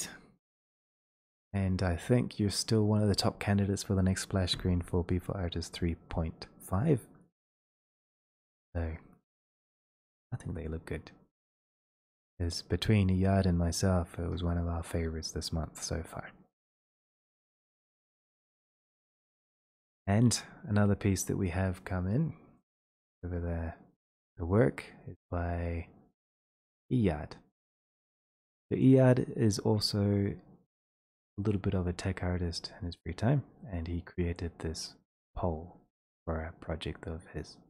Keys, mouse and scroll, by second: 20.0-20.6 scroll, 22.6 click, 26.1 click.